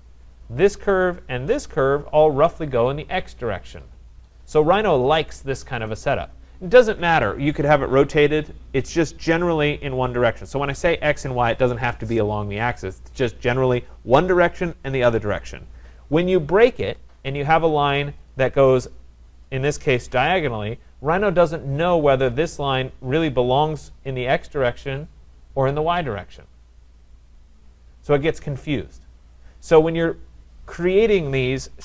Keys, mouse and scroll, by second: 1.0 click, 2.3 shift+click, 16.7 Escape, 16.9 Escape, 17.4 click, 18.3 click, 19.4 click, 20.0 Return, 22.4 click, 29.6 click, 30.8 click, 31.7 Delete.